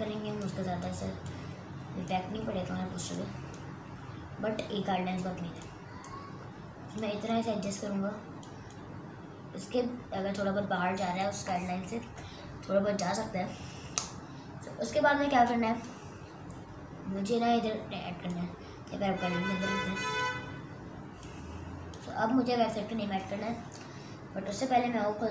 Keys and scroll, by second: 13.0 Return.